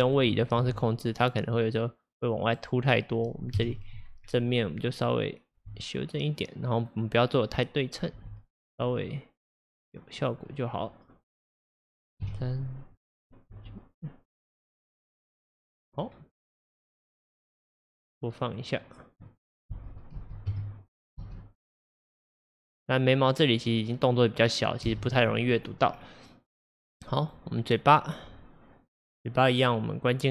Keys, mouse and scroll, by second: 0.0-0.7 shift+middle drag, 0.7 g, 3.7 KP_1, 4.3-5.1 scroll, 5.1 click, 5.7 g, 8.2 g, 11.5-12.3 middle drag, 12.3 KP_3, 12.9-13.6 scroll, 13.6 g, 15.7-16.1 scroll, 18.6-19.8 middle drag, 19.8 space, 20.2 space, 20.5 KP_0, 21.2 space, 25.0 space, 25.4 scroll, 27.3 click, 29.0-30.3 drag.